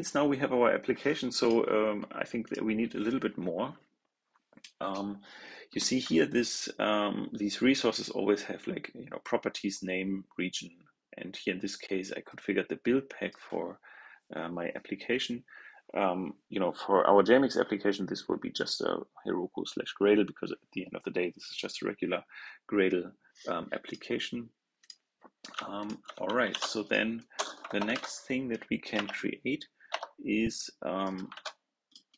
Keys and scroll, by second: 26.4 super+c, 27.8 super+v, 31.2 super+c.